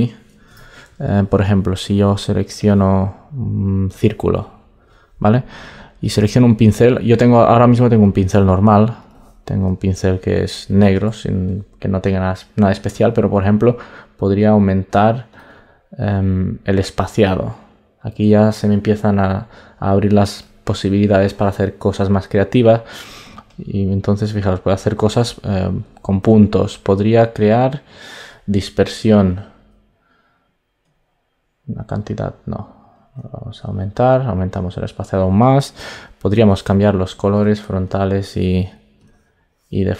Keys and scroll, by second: 0.4 alt+BackSpace, 11.0 super+z, 26.4 super+z.